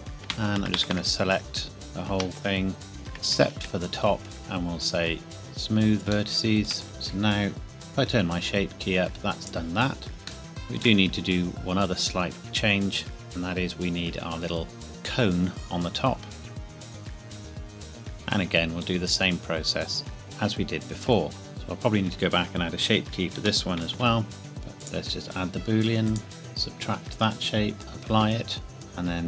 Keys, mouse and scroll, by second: 0.1 click, 0.2 ctrl+KP_Add, 2.9 ctrl+KP_Subtract, 4.4 right click, 5.4 click, 6.3 shift+middle click, 6.9 click, 10.5 shift+middle click, 11.0 scroll up 1, 12.0 scroll down 1, 14.8 Tab, 15.0 scroll up 1, 16.5 click, 16.6 scroll down 1, 16.7 o, 16.8 g, 17.0 scroll up 1, 17.1 Escape, 17.2 middle click, 17.4 g, 17.6 click, 18.0 click, 20.4 KP_1, 21.5 middle click, 21.9-22.3 scroll up 1, 23.4 g, 24.0 z, 24.5 click.